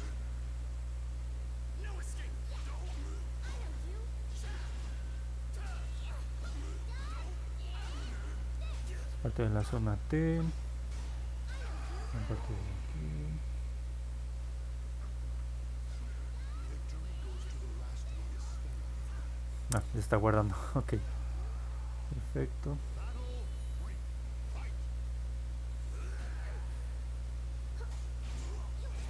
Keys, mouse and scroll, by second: 0.3 click, 0.7 click, 1.0 click, 1.4 click, 1.7 click, 2.2 click, 2.7 click, 3.1 click, 3.5 click, 3.8 click, 4.3 click, 4.6 click, 5.0 click, 5.4 click, 5.8 click, 6.1 click, 6.4 click, 6.8 click, 7.5 click, 7.8 click, 9.4 click, 9.7 click, 10.0 click, 10.4 click, 10.8 click, 11.2 click, 11.6 click, 11.9 click, 12.3 click, 12.6 click, 12.9 click, 13.9-15.1 drag, 25.9 click, 27.0 click, 27.3 click, 27.6 click, 28.1 click, 28.4 click, 28.8 click.